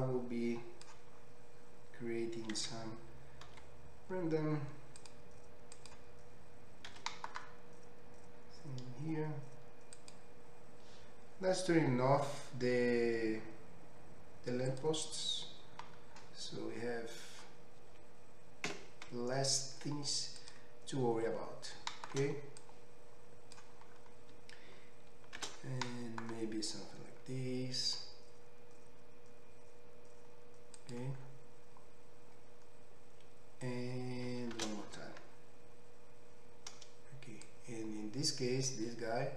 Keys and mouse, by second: 0.0-6.3 middle drag, 0.0 1, 3.5 ctrl+r, 6.3 right click, 6.3-14.7 drag, 6.9 s, 18.7 x, 24.0-25.8 shift+drag, 25.8 shift+d, 30.9-37.5 drag, 35.1 shift+r.